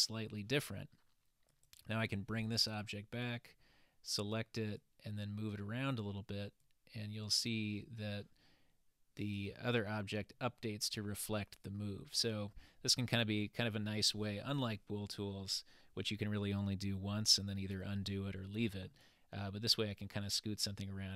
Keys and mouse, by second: 1.5 click, 3.2 click, 4.8-5.6 drag, 6.7-7.4 drag, 9.2 click, 9.9-10.4 middle drag, 11.7-12.6 middle drag, 19.5-21.1 middle drag.